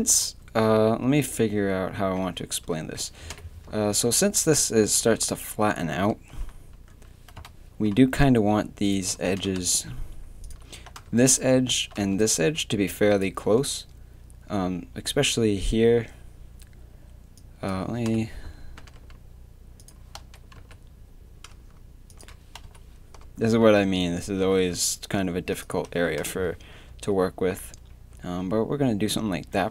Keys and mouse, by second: 0.4 a, 2.4 Tab, 3.3 KP_7, 3.7 Tab, 4.3 z, 4.6 a, 5.0 a, 6.1 z, 6.5 a, 6.9 a, 7.4 KP_3, 9.2 g, 10.7 a, 11.7 a, 12.7-15.5 drag, 12.9 a, 17.4 click, 18.1 KP_7, 18.8 g, 20.2 z, 20.6 g, 22.7 KP_3, 23.2 z, 24.4 g, 26.3 KP_7, 26.9 z, 27.6 a, 28.1 z.